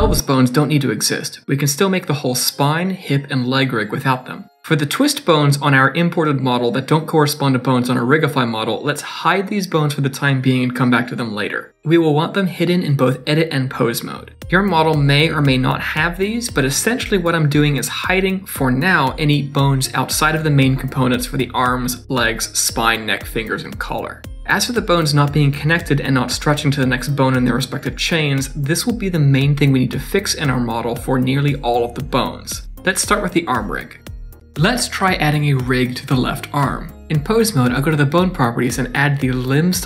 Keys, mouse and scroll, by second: 0.5-4.1 typing, 0.8 click, 1.6 shift+middle click, 1.7 click, 1.8 click, 2.0 middle click, 2.2 shift+middle click, 2.3 middle click, 2.3 scroll up 1, 2.3 middle click, 2.4 click, 2.8 middle click, 2.9 click, 3.4 middle click, 3.7 click, 4.0 click, 4.2 click, 4.3 click, 4.5 click, 4.7 middle click, 4.7 scroll down 2, 4.8 middle click, 4.9 shift+middle click, 5.1 middle click, 5.8 r, 6.6 click, 7.0 r, 8.4 click, 8.6 Tab, 9.0 click, 9.4 h, 9.7 click, 10.0 click, 10.7 h, 10.9 click, 11.2 h, 11.4 click, 11.7 click, 12.0 h, 12.3 shift+middle click, 13.1 click, 13.6 h, 14.0 click, 14.2 h, 14.3 click, 14.8 click, 15.3 h, 15.6 click, 16.0 click, 16.3 h, 16.4 Tab, 16.9 click, 17.4 h, 17.6 click, 17.9 click, 18.2 click, 18.4 h, 18.8 click, 19.2 click, 19.3 h, 19.5 shift+middle click, 20.0 click, 20.7 h, 20.9 click, 21.2 click, 21.5 click, 21.9 h, 22.1 click, 22.4 click, 22.9 h, 24.0 middle click, 24.3 scroll down 2, 24.4 Tab, 25.0 click, 25.3 scroll up 2, 25.6 g, 27.2 click, 27.4 g, 28.1 shift+middle click, 28.9 click, 29.2 g, 31.4 shift+middle click, 31.8 z, 33.0 middle click, 34.0 shift+middle click, 34.3 middle click, 37.6 click, 38.0 Tab.